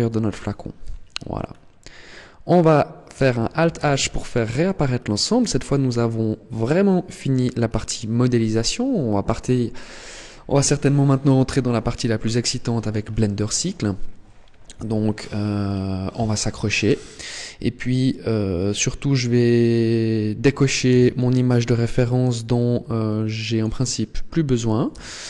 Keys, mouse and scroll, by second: 0.6 KP_1, 1.3-2.1 scroll up 3, 2.1 scroll up 2, 3.4 alt+h, 4.3 Tab, 4.7-5.1 scroll down 4, 6.1 shift+middle click, 6.9-7.3 scroll up 3, 7.7 scroll down 1, 15.1-16.4 scroll down 6, 16.4 scroll down 1, 18.8-20.6 scroll up 2, 20.7 n, 23.2 click, 24.3 click, 24.7 n.